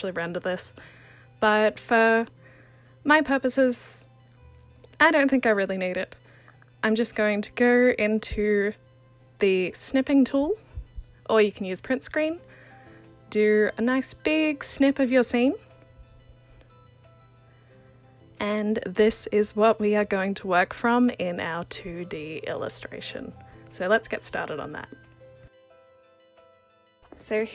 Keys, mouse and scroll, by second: 2.8-5.3 alt+drag.